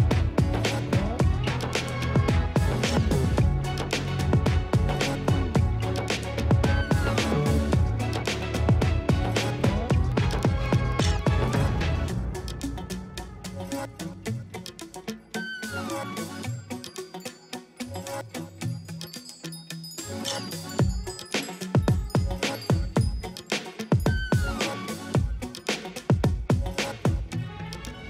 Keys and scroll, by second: 6.9 ctrl+space, 7.1 [, 11.2 space, 12.6 space, 12.8 ], 14.0 space, 15.3 space, 15.6 space, 16.2 space, 18.7 space, 21.0 [, 21.2 space, 22.7 space, 22.9 space, 24.1 F9, 25.6 ], 27.0 space.